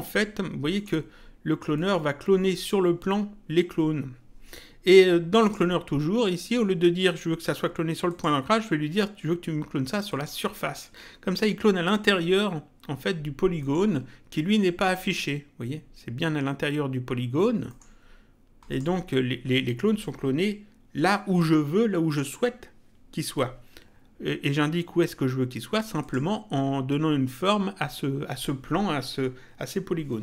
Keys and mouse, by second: 0.7 middle click, 5.4 click, 8.1 click, 10.1 click, 13.6 middle click, 17.7 middle click, 18.7 click, 26.0 click.